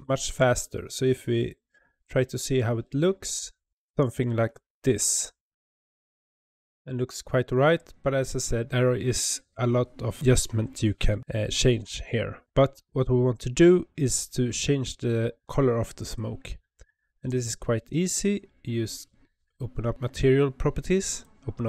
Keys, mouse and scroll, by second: 2.3 click, 2.9 click, 4.2-4.5 scroll down 1, 4.6-5.7 shift+middle drag, 5.7-6.7 scroll up 2, 6.7 space, 16.0-21.6 drag.